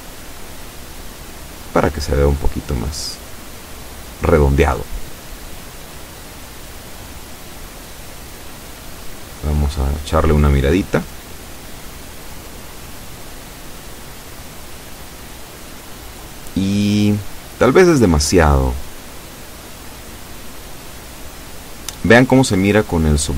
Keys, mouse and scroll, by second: 2.9-5.6 scroll down 2, 5.8 click, 6.2-7.8 middle drag, 7.9 scroll down 1, 8.9 Tab, 9.3-11.3 middle drag, 12.5-16.4 middle drag, 16.5-16.9 scroll up 2, 17.2-18.2 middle drag, 18.5 KP_7, 19.3-19.7 scroll down 2, 20.6 z, 22.3 scroll up 2.